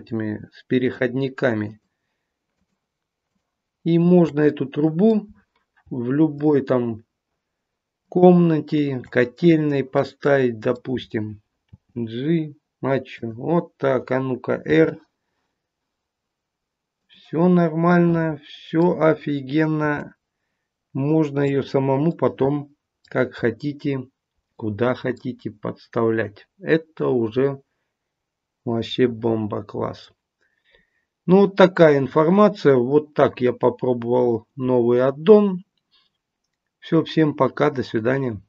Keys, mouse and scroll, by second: 0.0 scroll up 6, 0.7-4.4 shift+click, 4.4 middle click, 5.2-5.8 scroll down 1, 5.8-6.3 scroll down 1, 6.3 shift+click, 8.0 shift+click, 9.3 middle click, 10.1 middle click, 10.8-11.6 scroll down 1, 11.6-13.1 scroll down 2, 11.6 g, 14.7 r, 17.5-18.4 scroll down 3, 17.8 middle click, 19.7 r, 22.0-22.8 scroll up 1, 23.3-24.0 scroll up 1, 24.0-24.5 scroll down 1, 24.5 middle click, 25.3-26.5 scroll down 3, 28.4-28.8 scroll up 1, 28.8 middle click, 30.7-31.8 scroll down 2, 32.0-35.1 scroll down 1.